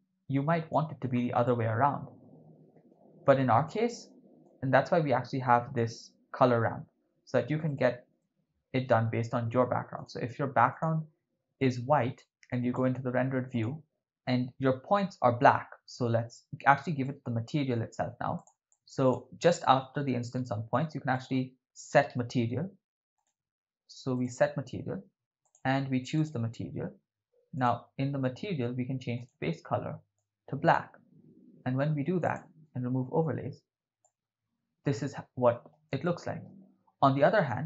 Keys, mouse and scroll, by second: 1.5-3.0 ctrl+middle drag, 4.4-5.8 drag, 7.8 right click, 8.2 middle click, 9.9 click, 10.7 click, 12.3 click, 14.0 right click, 17.0 middle click, 18.4 click, 18.7 click, 20.3 shift+a, 25.5 click, 27.8 click, 29.2 click, 32.4 click, 34.1-35.7 ctrl+middle drag, 36.1 shift+middle click.